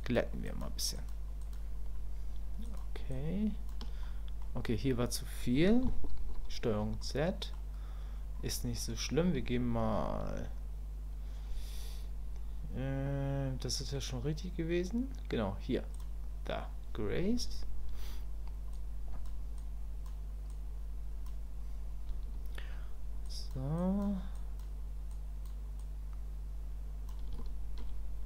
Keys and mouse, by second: 0.0 shift+click, 0.5 shift+click, 0.9 shift+click, 1.4 shift+click, 2.6 shift+click, 3.1 shift+click, 4.0 click, 6.2 ctrl+z, 7.0 click, 16.0-19.3 drag, 19.6 click, 20.5 click, 23.2 click, 23.8 click, 24.3 click, 25.1 click, 25.8-27.1 drag, 27.4 shift+click.